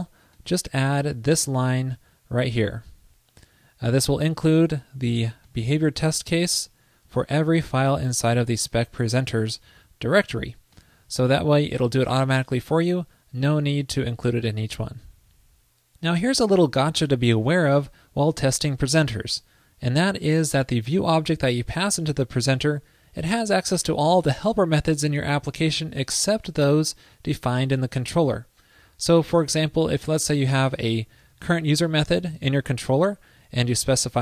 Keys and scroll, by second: 1.1 super+v, 11.3 super+s, 29.5 super+c, 30.5 super+v, 31.1 super+v.